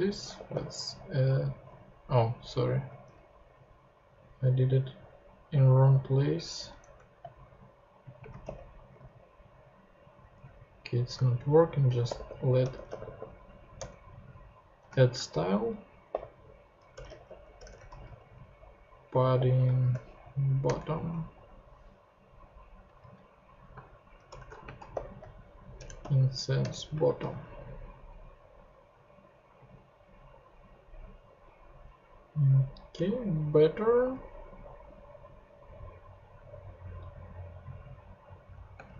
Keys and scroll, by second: 0.0-1.0 typing, 1.7 super+z, 2.9 super+z, 6.8 super+BackSpace, 8.2 space, 8.9 super+Tab, 10.4 super+Tab, 11.1 shift+super+Tab, 11.7-13.5 typing, 13.7 Return, 15.1-19.8 typing, 20.2 shift+Down, 20.6 Return, 23.7-26.9 typing, 25.8 Return, 26.6 Return, 27.3 super+Tab, 38.7 space.